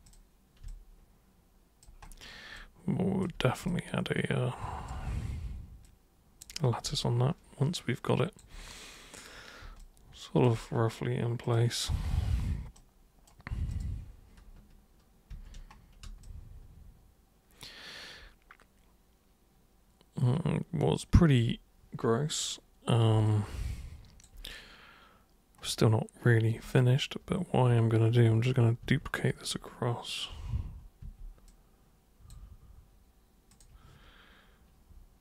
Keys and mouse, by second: 0.0 super+click, 0.6-1.8 alt+super+drag, 2.5 alt+super+click, 3.6-4.9 alt+super+drag, 5.8 super+click, 7.0-8.3 alt+super+drag, 9.8 alt+super+click, 11.4 super+click, 12.7 super+right click, 13.6 super+click, 15.3 ctrl+super+1, 16.2-21.3 alt+super+drag, 23.2-24.2 alt+super+drag, 28.8 ctrl+super+d, 31.0 super+w, 31.4-32.3 super+drag, 33.5 super+click.